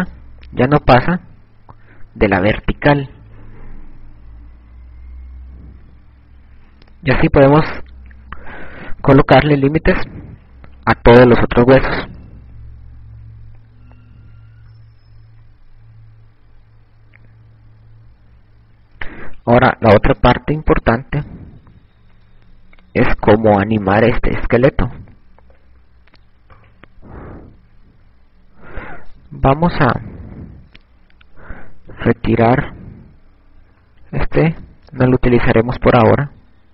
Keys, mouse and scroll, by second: 15.3 a, 24.7 click, 27.5 right click, 33.0 right click, 34.6 Delete.